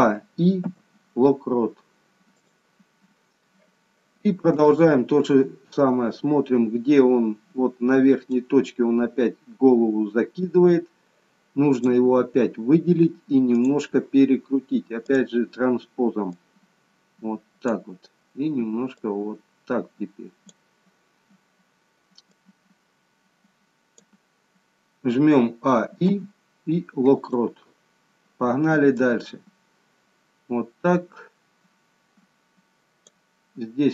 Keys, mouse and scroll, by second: 0.0 a, 0.6 a, 4.5 click, 8.2 click, 11.8 click, 15.1 click, 16.4 click, 19.1 click, 22.3 click, 26.0 a, 27.1 i, 29.1 click.